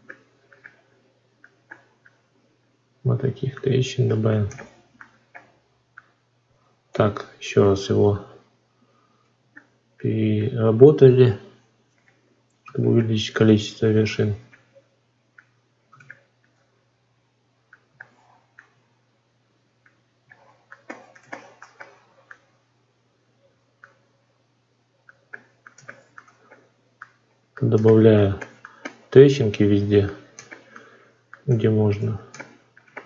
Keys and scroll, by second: 6.8 ctrl+r, 31.9 ctrl+z.